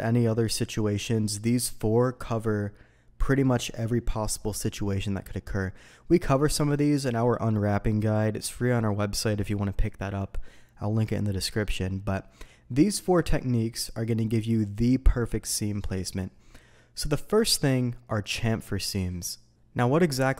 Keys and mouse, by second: 20.1 middle click.